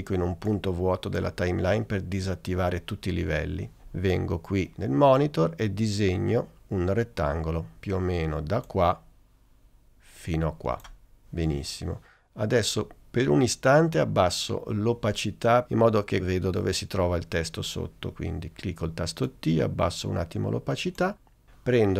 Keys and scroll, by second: 19.1 t.